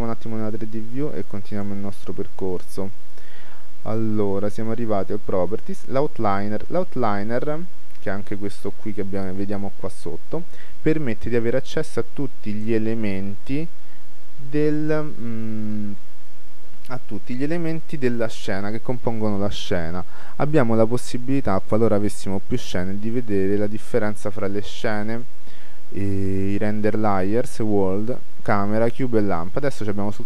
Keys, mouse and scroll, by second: 1.7-3.4 drag.